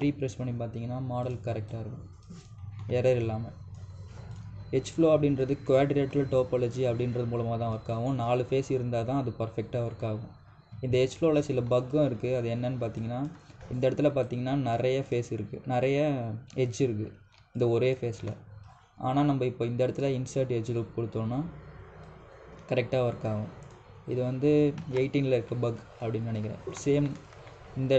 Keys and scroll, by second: 0.7 3, 25.6 ctrl+z.